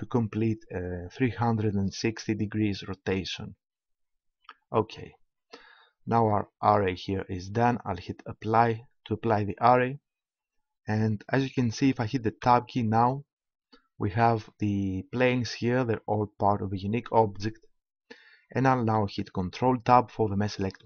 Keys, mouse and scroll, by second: 8.4-12.4 drag, 12.4 Tab, 13.6-15.6 drag, 19.5 ctrl+Tab.